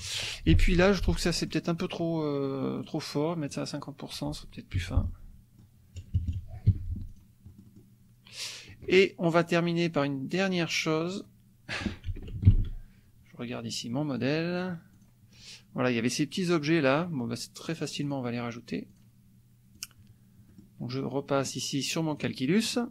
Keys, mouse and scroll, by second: 0.8 F2, 0.9 click, 1.4 click, 2.8 right click, 3.4 click, 4.8 F1, 5.1 click, 6.0 KP_Subtract, 6.6 Escape, 7.1 click, 7.5 click, 9.3 click, 11.2 click, 12.5 ctrl+shift+l, 14.1 click, 14.6 click, 14.9 click, 18.0 click, 18.9 click, 19.8 click, 20.6 click, 22.2 click, 22.6 click.